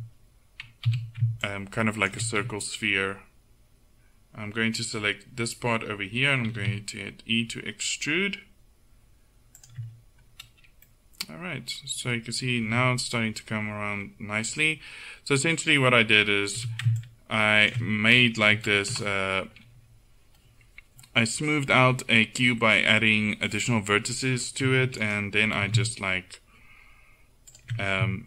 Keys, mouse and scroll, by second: 0.9 a, 1.5 click, 6.5 e, 12.7 KP_1, 16.6 a, 17.0-18.5 drag, 18.5 Delete, 24.7 Tab, 25.1 right click, 25.7 s.